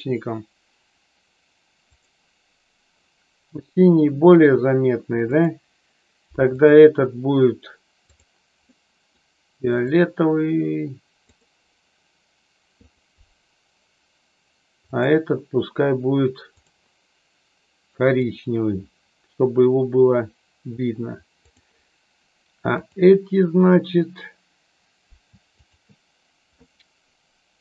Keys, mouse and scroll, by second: 1.9 click, 3.8 middle click, 8.7 middle click, 9.8 click, 16.5 click, 18.0 click, 21.4 click, 22.6 click, 25.6 shift+click.